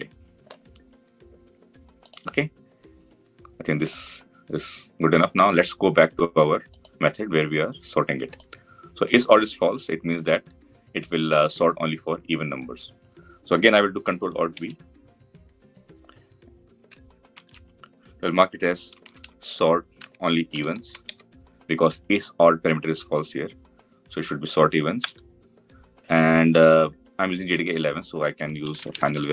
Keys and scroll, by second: 14.5 ctrl+alt+v.